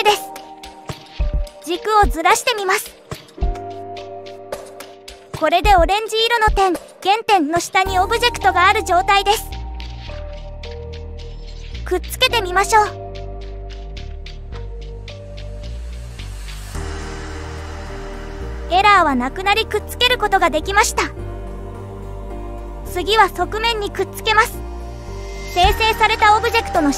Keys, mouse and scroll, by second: 1.0 click, 2.3 click, 4.0 g, 6.7 click, 8.4-11.1 middle drag, 11.7-14.7 middle drag, 15.0 click, 15.8 shift+click, 16.9-18.3 right drag, 19.4 click, 19.9-23.7 middle drag, 26.1 click, 26.4-26.9 right drag.